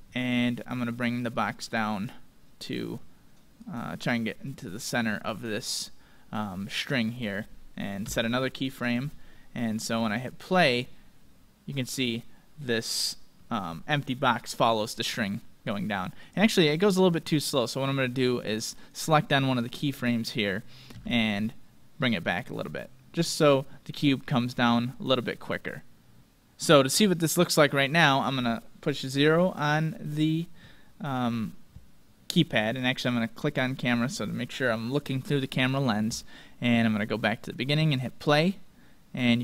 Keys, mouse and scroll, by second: 0.7-2.6 drag, 2.8-8.2 drag, 10.1-12.4 drag, 11.3-13.3 middle drag, 16.3-18.1 drag, 18.7-20.5 right drag, 20.9 g, 22.9-24.8 drag, 33.3-35.2 drag, 34.2-35.4 scroll up 1, 35.4-37.4 middle drag, 37.0-39.4 drag.